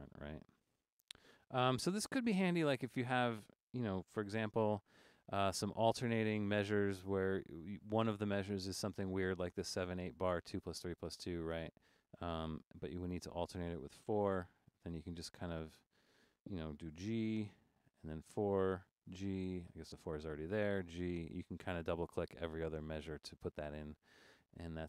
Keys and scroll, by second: 4.1 g, 13.0 4, 13.4 4, 14.7-15.5 typing, 16.9-22.2 typing.